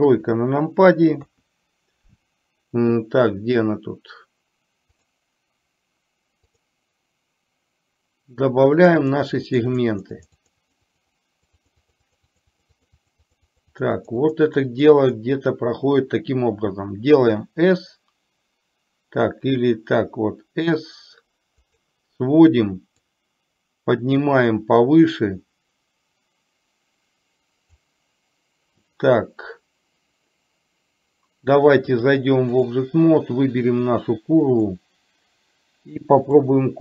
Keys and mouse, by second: 5.0 click, 6.7 click, 8.9 click, 9.2 click, 9.5 click, 9.9 click, 10.3 click, 10.7 click, 10.9-12.2 drag, 12.4 click, 12.7 click, 13.0 click, 13.3 click, 14.0 click, 14.3 click, 15.0 click, 17.5 s, 23.2-27.9 drag, 32.0 click, 34.5 click, 36.4-36.8 drag.